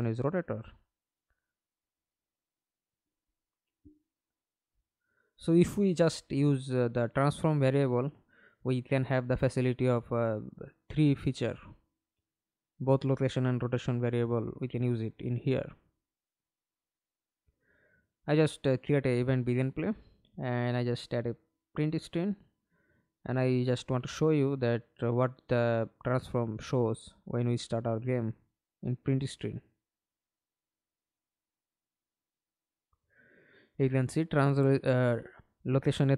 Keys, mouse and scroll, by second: 12.9 right click, 14.2 right click, 15.1-17.9 typing, 18.4-18.8 scroll up 5, 21.5-23.5 typing, 25.7 double click, 30.8 double click, 31.1 middle click, 31.7 F11, 32.2 alt+p, 35.4 Escape.